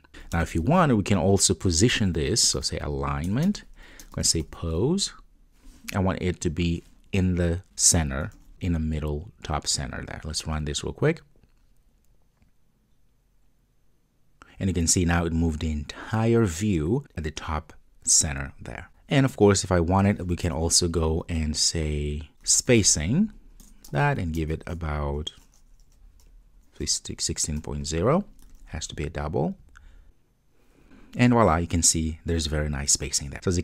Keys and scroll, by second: 3.4 Return, 7.7 Return, 8.3 Return, 8.4 super+s, 8.5 super+F2, 9.8 ctrl+d, 23.7 Return, 28.6 super+s, 29.6 super+F2.